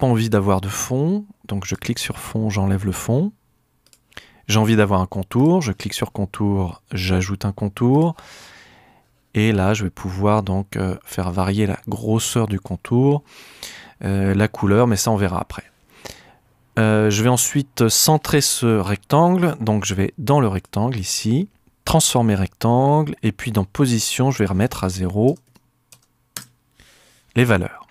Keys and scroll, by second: 25.3 0, 25.5 Tab, 25.9 0, 26.3 Page_Up.